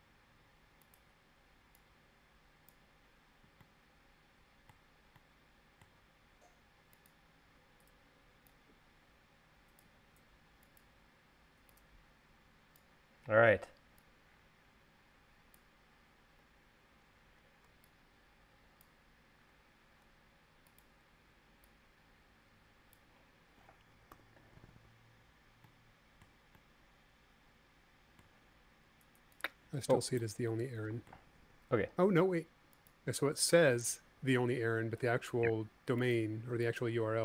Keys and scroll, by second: 24.9 u, 34.2 u.